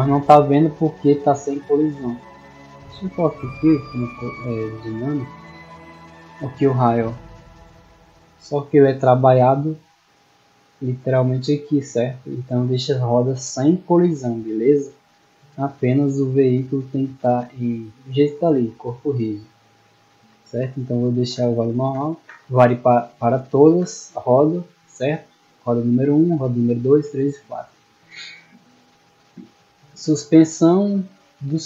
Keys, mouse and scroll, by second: 3.4 click, 4.0 click, 11.9 click, 12.4 click, 16.8 right click, 18.9 right click, 25.0 middle click, 27.4 middle click.